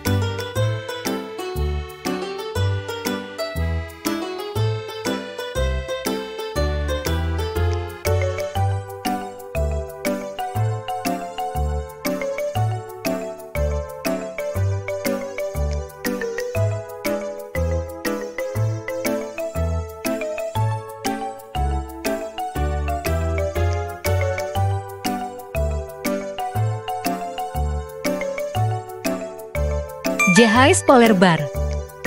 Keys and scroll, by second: 0.5 Delete, 2.5 Delete, 5.3 Delete, 7.3 i, 11.4-12.0 typing, 14.8 space, 18.7 Delete, 20.8 Delete.